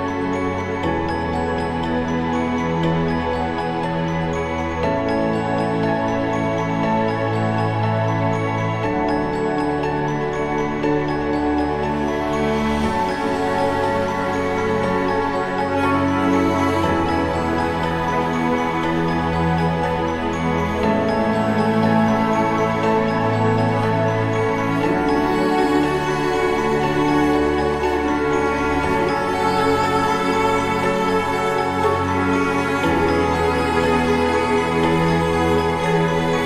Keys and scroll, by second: 4.6 ctrl+-, 5.5 ctrl+=, 10.9 ctrl+0.